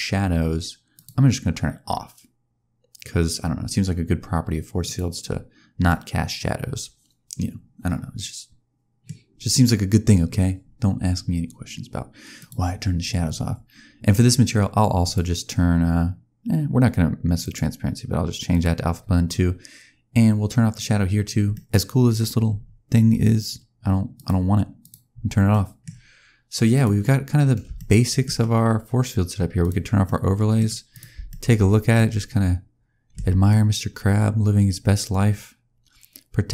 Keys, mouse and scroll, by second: 0.8 click, 5.8 middle click, 9.2-11.3 scroll down 1, 12.3 click, 14.9 click, 18.4 click, 21.4 middle click, 21.7-23.4 scroll up 2, 23.4 scroll up 1, 24.0 click, 25.2-26.6 scroll down 4, 25.4 middle click, 26.6 click, 27.6 shift+scroll down 1, 27.7 shift+middle click, 29.5 click, 29.9 middle click, 30.8 click, 31.2 shift+middle click, 31.5-31.8 scroll up 2, 31.8 middle click, 33.1 space, 33.4 middle click.